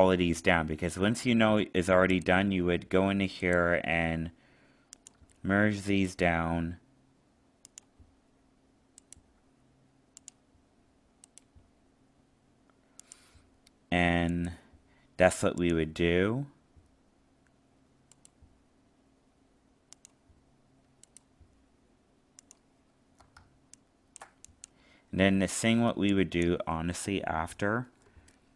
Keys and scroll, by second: 23.4 alt+space.